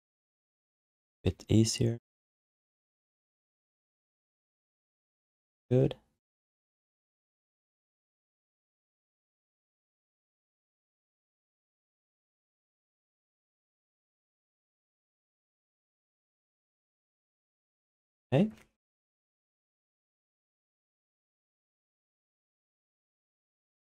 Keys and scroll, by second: 10.7 ctrl+z, 16.5 q, 23.4 e.